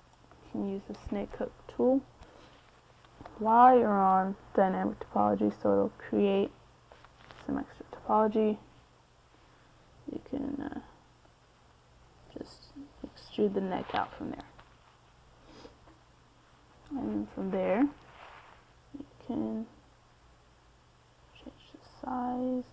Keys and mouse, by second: 3.2-4.8 drag, 5.2 middle click, 8.7 middle click, 9.4 KP_3, 11.2 f, 16.2-17.4 middle drag, 17.9 g, 18.9 KP_1, 20.0-22.2 drag.